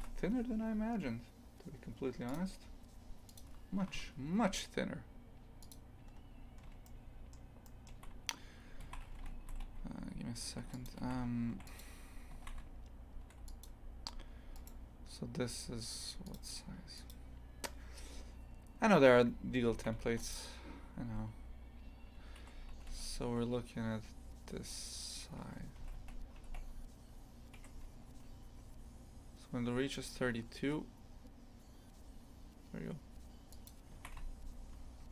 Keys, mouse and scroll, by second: 0.0 click, 5.7 click, 6.1 scroll up 2, 6.8-8.8 shift+middle drag, 8.8 shift+f, 11.0 shift+f, 14.5-19.7 right drag, 19.7 shift+f, 21.0 s, 22.7 s, 25.8 a, 25.9 a, 26.4 s, 28.1 s, 33.9 shift+f.